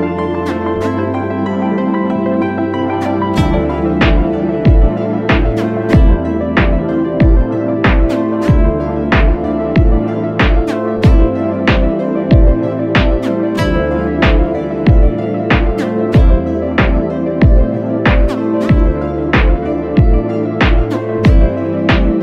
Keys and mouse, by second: 2.4-5.0 drag, 5.7-7.3 middle drag, 7.3 click, 9.4 ctrl+t, 11.1-21.1 middle drag.